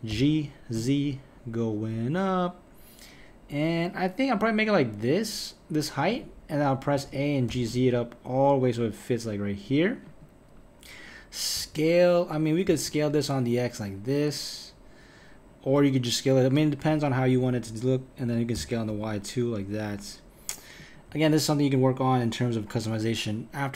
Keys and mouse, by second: 0.1 g, 6.9 a, 7.5 g, 11.6 s, 18.5 s, 21.1 KP_1.